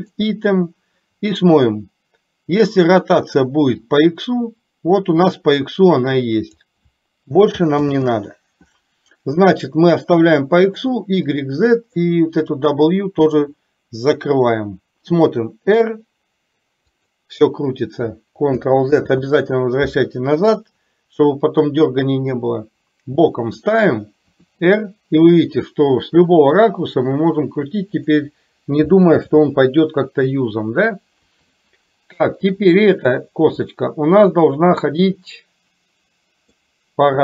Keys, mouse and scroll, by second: 0.1 click, 4.0-6.6 drag, 10.7 click, 12.5 click, 15.2 r, 19.0 ctrl+z, 20.7-23.6 middle drag, 24.4 r, 29.2 ctrl+z, 31.2 KP_3, 33.9-36.6 middle drag.